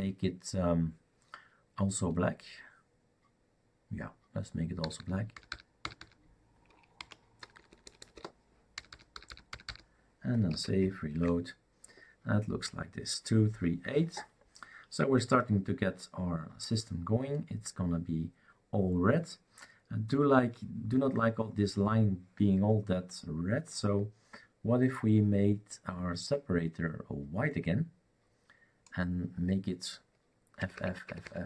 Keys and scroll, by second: 4.8-5.5 typing, 6.7-9.8 typing, 10.5 ctrl+s, 11.0-11.7 typing, 30.6-31.0 typing.